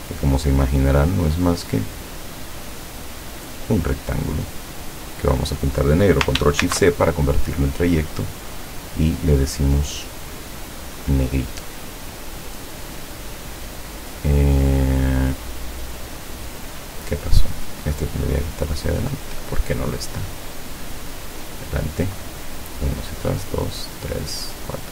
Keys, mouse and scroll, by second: 1.5-4.9 drag, 6.7 ctrl+shift+c, 7.7 click, 8.6 click, 10.6 click, 12.4 click, 13.8 click, 14.9 click, 17.3-17.7 scroll down 2, 18.9 click, 21.5 click, 22.7 click, 23.4 click, 23.9 click, 24.5 click.